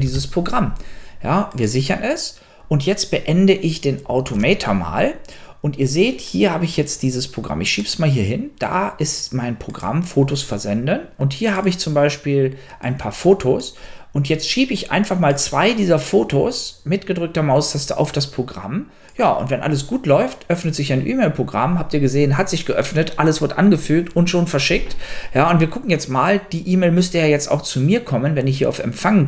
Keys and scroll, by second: 0.0-0.8 typing, 4.6 super+q.